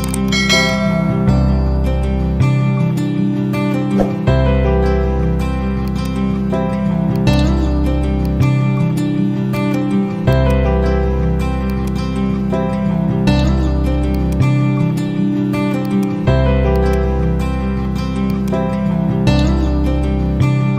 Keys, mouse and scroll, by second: 0.0 click, 0.9-4.2 typing, 5.8 click, 11.9 ctrl+a, 14.1 shift+click, 14.4-15.4 typing, 15.8 click, 18.5 ctrl+a.